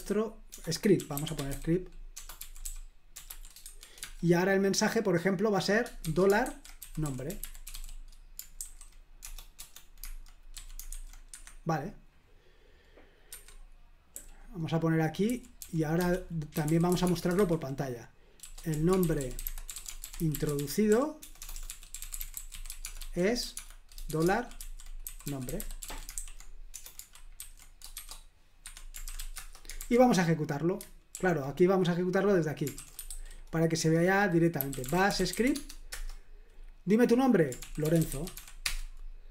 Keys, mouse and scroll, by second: 0.0-4.0 typing, 5.8-10.9 typing, 11.3 Escape, 13.3 Escape, 14.1-26.4 typing, 28.7 Escape, 28.8-29.7 typing, 29.8 super+h, 31.1 super+l, 32.6-35.8 typing, 34.0 Return, 35.9 Return, 37.3-38.9 typing.